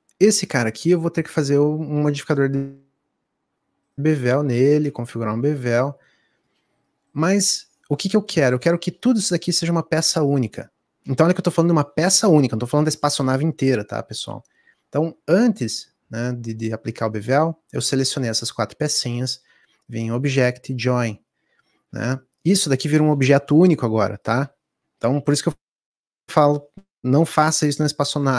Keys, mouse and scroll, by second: 6.0-9.8 drag, 24.3 ctrl+z.